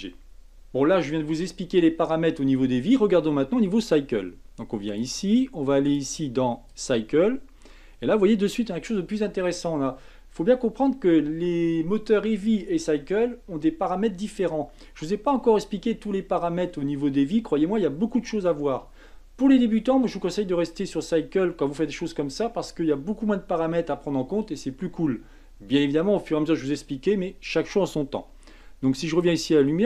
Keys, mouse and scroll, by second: 0.3 click, 4.9 click, 5.9-8.9 drag, 29.2 click.